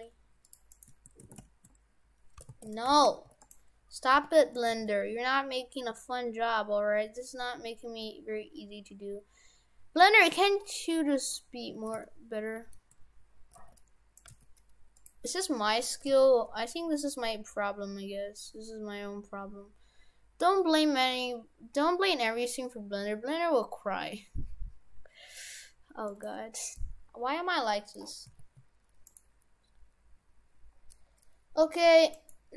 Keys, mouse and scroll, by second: 0.7 right click, 1.5 shift+s, 2.5 ctrl+z, 2.9 shift+f, 4.1 g, 4.7 g, 11.1-12.0 scroll up 5, 12.1 shift+middle click, 13.0-13.5 scroll up 2, 13.5 g, 14.3 g, 16.1 g, 26.8 middle click, 28.3 s, 30.8-31.5 scroll down 5, 31.6 s.